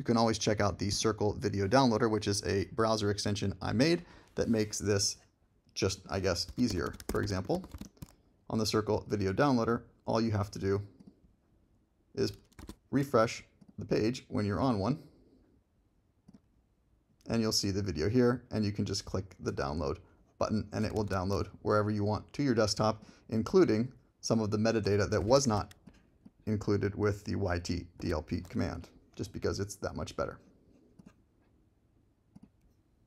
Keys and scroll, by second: 6.2-8.3 typing, 12.6 super+r, 21.0 super+d.